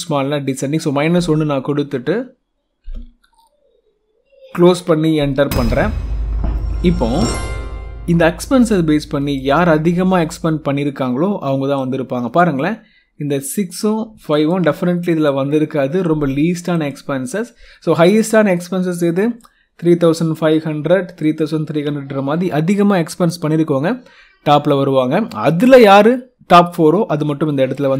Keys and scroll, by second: 1.0 Tab, 4.4 shift+0, 5.4 Return.